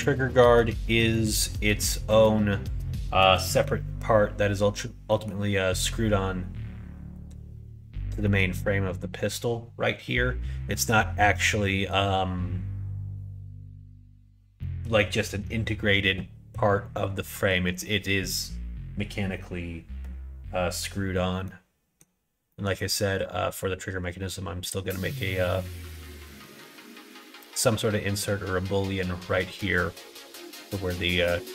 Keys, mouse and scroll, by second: 0.2 middle click, 5.1 middle click, 8.2 middle click, 11.7 middle click, 14.6 middle click, 17.3 middle click, 21.5 middle click, 22.5 middle click, 26.0 middle click, 28.0 middle click, 29.4 middle click, 30.4 middle click, 30.9 middle click.